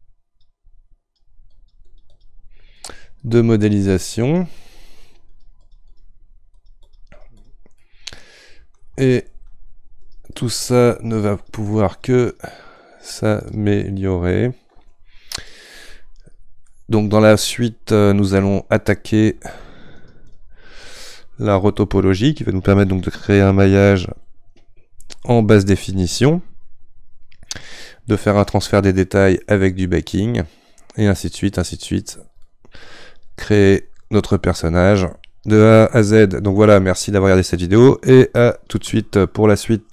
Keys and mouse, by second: 7.8-10.0 middle drag, 10.0-16.8 shift+drag, 16.8-20.0 middle drag, 20.0-21.0 shift+drag, 21.0-35.6 middle drag.